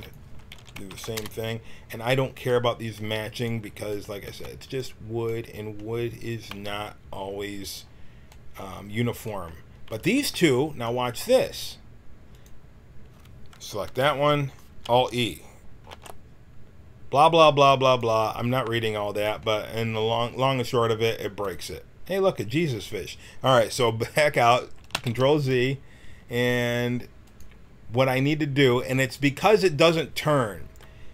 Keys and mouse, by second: 0.5 r, 2.9 g, 4.2 b, 7.5 g, 9.9 a, 10.1 b, 12.3-13.8 drag, 13.8 l, 16.0 alt+e, 17.9-19.1 drag, 19.2 click, 24.9 ctrl+z, 27.2 click, 29.1 middle click.